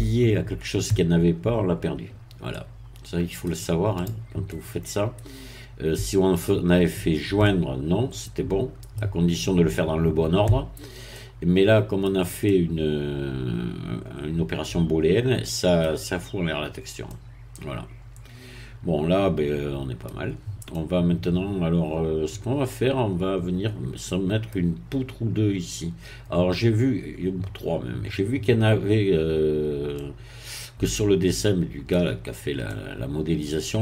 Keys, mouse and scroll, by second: 2.5-3.6 middle drag, 4.0 click, 4.4-9.1 middle drag, 11.1-16.0 middle drag, 16.1-16.6 scroll down 1, 16.6-17.0 scroll down 1, 17.0-20.4 middle drag, 20.4 scroll up 1, 20.7-24.6 middle drag, 24.6-24.9 scroll down 1, 29.4-29.9 scroll up 1, 29.9-32.3 middle drag, 32.7-33.8 middle drag.